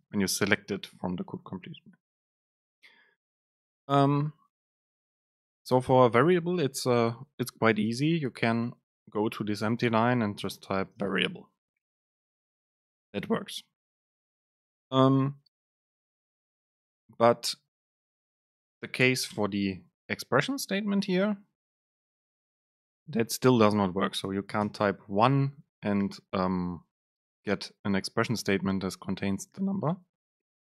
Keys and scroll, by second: 0.0 super+space, 8.7 BackSpace, 19.1 BackSpace, 21.1 Up, 21.8 Down, 22.3 Up, 22.6 Down.